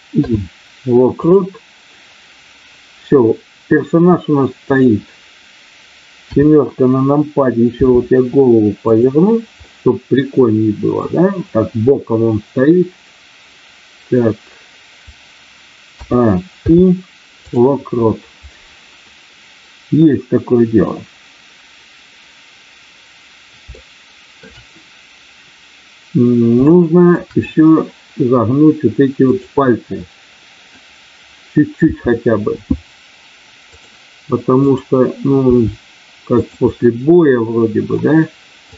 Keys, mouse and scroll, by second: 0.1 i, 6.1 KP_7, 7.8 r, 9.6-11.1 middle drag, 16.5 i, 23.6 shift+middle click, 26.6 shift+middle click, 29.2 click, 30.0 middle click, 31.8 r, 34.7 click, 35.4 r, 36.7-37.9 middle drag.